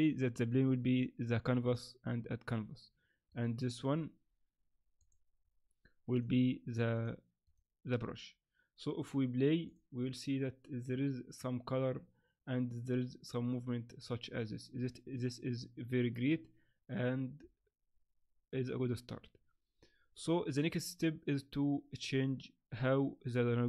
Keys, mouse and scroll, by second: 0.4 click, 1.6 click, 3.3 right click, 5.0 click, 6.1 click, 6.9 click, 7.4 click, 9.7 click.